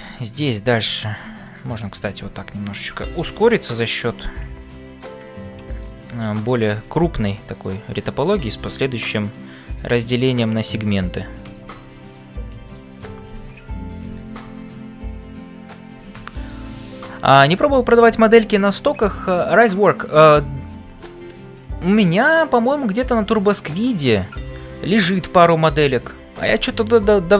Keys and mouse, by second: 0.0-27.3 typing, 5.8 click, 11.5 click, 12.6 shift+click, 14.2 shift+click.